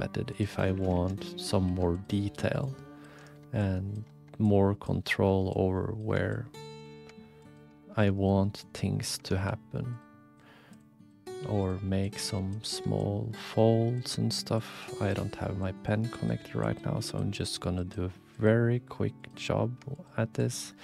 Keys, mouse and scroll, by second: 0.3 click, 1.0 alt+z, 1.1 click, 1.6 f, 2.6 click, 3.2 ctrl+z, 5.5 click, 6.3 shift+click, 7.4 shift+click, 8.1 shift+click, 8.4 click, 9.4 f, 10.4 click, 11.4 f, 12.1 click, 12.6 ctrl+z, 14.5 click, 15.7 shift+click, 16.2 shift+click, 16.6 shift+click, 17.0 shift+click, 17.3 shift+click, 17.8 shift+click, 18.3 shift+click, 19.2 shift+click, 19.9 shift+click, 20.4 shift+click.